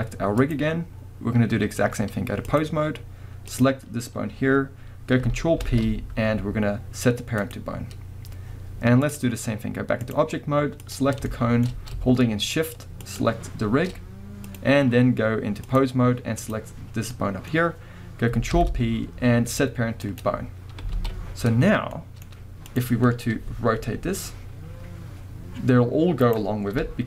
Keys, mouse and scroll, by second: 0.4-3.6 drag, 5.6 ctrl+p, 9.0-10.9 drag, 11.3-13.0 shift+middle drag, 13.0 shift+click, 14.4-16.5 drag, 17.1-22.7 middle drag, 18.5 ctrl+p, 21.0 alt+a, 22.7 click, 23.8 r, 26.3 right click, 26.7 KP_1.